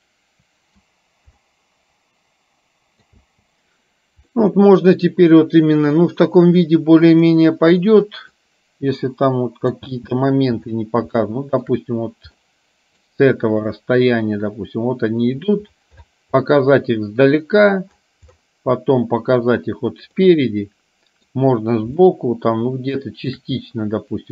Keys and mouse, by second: 1.7-3.4 middle drag, 3.4 space, 4.4 middle click, 7.2 click, 7.9 middle click, 9.1 middle click, 10.1 space, 11.4 shift+middle click, 12.7 middle click, 20.4-21.6 middle drag, 22.2-23.7 shift+middle drag.